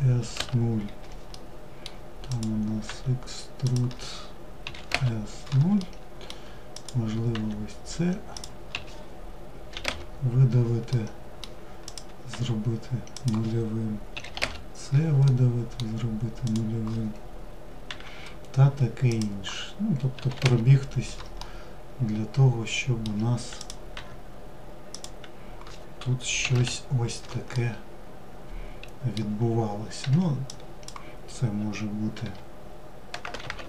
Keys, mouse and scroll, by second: 0.5-1.5 middle drag, 1.5 click, 5.0-5.9 middle drag, 5.9 click, 10.1-11.0 middle drag, 11.0 click, 14.5-15.6 middle drag, 15.6 click, 20.6-22.8 middle drag, 22.8 click, 26.7-29.2 middle drag, 29.2 1, 29.6 drag.